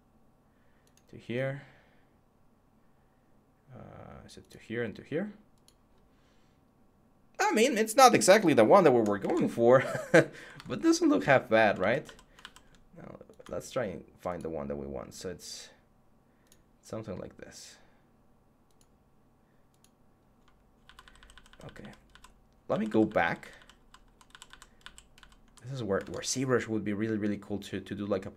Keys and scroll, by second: 9.0 Tab, 10.3 Tab, 11.6 ctrl+z, 12.2 ctrl+z, 20.6 ctrl+z, 25.8 Tab.